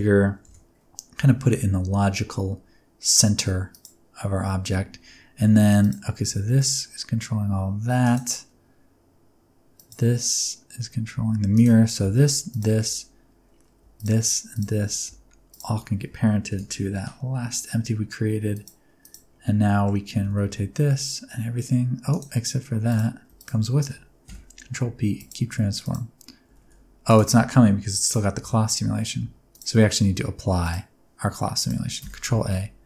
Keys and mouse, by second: 0.4 KP_1, 1.2 g, 1.4 z, 3.7 click, 5.8 click, 6.3 g, 8.1-9.3 middle drag, 9.7 click, 11.1 g, 11.6-12.0 middle drag, 12.5 shift+middle click, 15.5 shift+click, 16.5 ctrl+p, 19.6 middle drag, 20.1 r, 20.3 r, 23.4 shift+click, 24.2 ctrl+p, 26.5 r, 26.6 r, 27.1 click, 28.0 right click, 28.4 space, 29.2 space, 31.5 click, 32.0 ctrl+a.